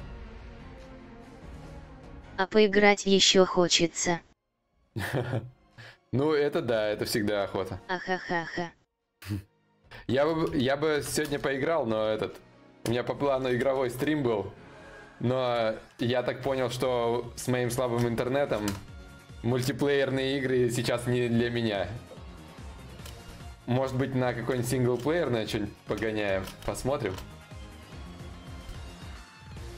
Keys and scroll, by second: 10.8 Return.